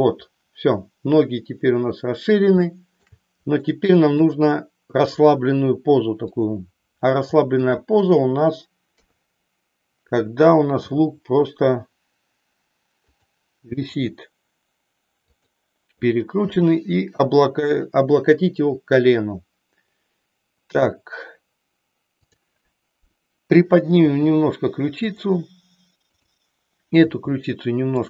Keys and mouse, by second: 2.6 shift+middle click, 3.7 middle click, 9.0 KP_3, 10.8 g, 13.2 click, 13.8 r, 16.3 g, 24.1 r.